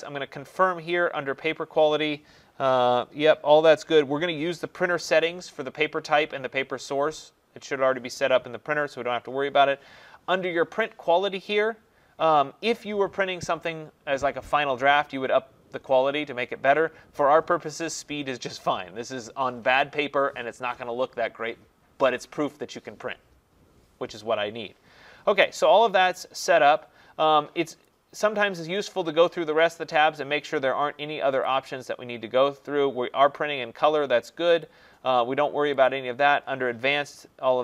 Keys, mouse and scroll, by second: 17.2 click, 27.9 click, 28.9 click, 31.5 click, 34.7 click, 35.9 click.